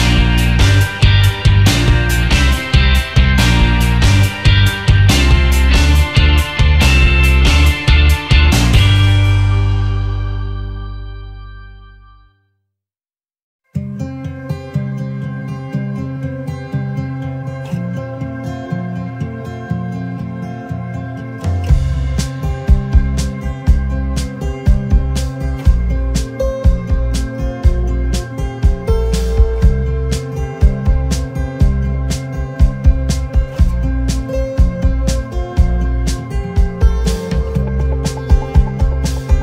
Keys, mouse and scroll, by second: 0.1 space, 0.8 alt+scroll up 1, 2.2 space, 2.8 alt+scroll down 1, 3.3 alt+scroll down 1, 3.6 shift+click, 4.3 alt+scroll up 1, 5.8 shift+click, 7.8 shift+click, 11.4 shift+click, 12.4 double click, 13.5 shift+click, 19.3 shift+click, 20.6 shift+click, 23.0 right click, 26.8 double click, 27.4 space, 28.6 shift+click, 30.8 ctrl+g, 31.7 shift+click, 35.0-35.6 alt+scroll down 1, 35.6 alt+scroll up 1, 37.5 shift+click.